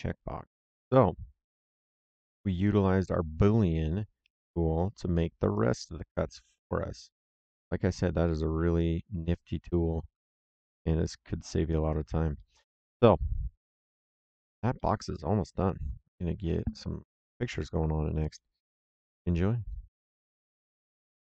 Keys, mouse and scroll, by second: 0.1 middle click, 0.4 right click, 5.0 middle click, 5.5 right click, 8.2 middle click, 8.7 right click, 12.3 middle click, 13.5 right click, 14.7 middle click.